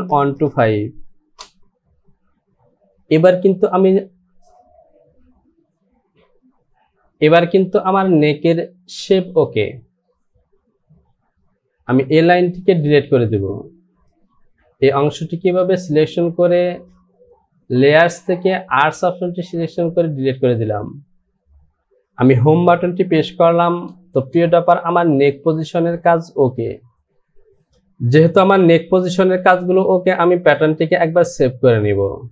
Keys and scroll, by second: 1.4 Return, 12.0 Delete, 22.9 Home, 26.6 Delete.